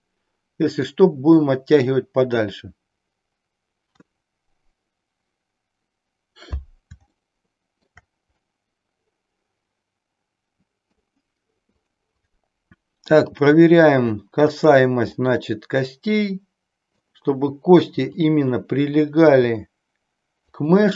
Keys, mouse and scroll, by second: 7.2 shift+middle click, 8.5-11.0 middle drag, 11.7 click, 13.2 g, 15.2-16.9 middle drag, 18.0 click, 19.3 g, 20.5 click.